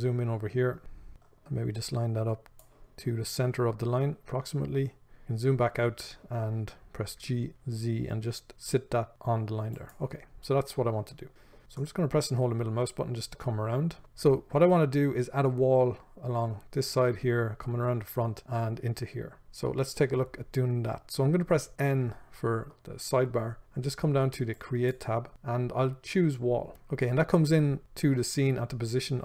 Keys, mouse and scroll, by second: 4.2-4.8 scroll down 1, 5.4-6.4 scroll up 1, 7.5 g, 10.6-11.0 scroll down 1, 11.4-24.9 shift+middle drag, 22.1 n, 24.9 click.